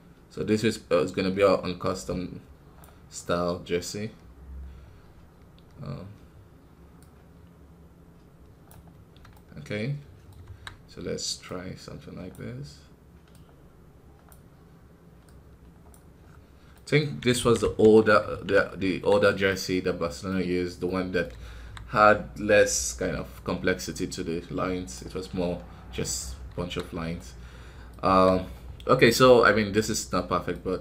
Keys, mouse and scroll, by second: 9.2-10.4 middle drag, 10.4 KP_1, 12.2-16.2 drag, 16.2-16.7 scroll down 2, 16.7 middle click, 17.0 scroll up 3, 17.3 ctrl+z, 17.5 ctrl+z, 18.2 ctrl+z, 18.8 KP_1, 19.4 middle click, 20.4-20.7 scroll up 1, 20.8 middle click, 21.4 KP_1, 23.5 KP_1, 24.2 KP_1, 25.5 scroll down 3, 25.8 middle click, 26.2 scroll up 2, 26.5 KP_1, 27.1 middle click, 28.0 KP_1, 28.3-28.7 scroll down 4, 29.0 middle click, 29.2-29.7 scroll up 4, 29.7-30.8 middle drag.